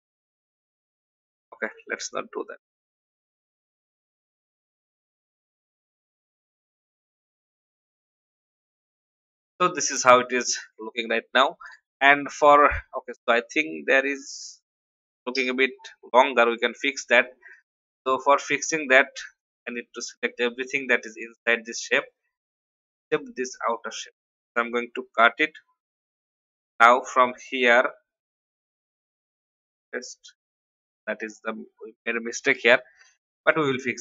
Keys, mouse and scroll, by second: 8.8 alt+scroll down 1, 9.3-21.3 drag, 23.5 shift+click, 25.0 ctrl+x, 33.5 a.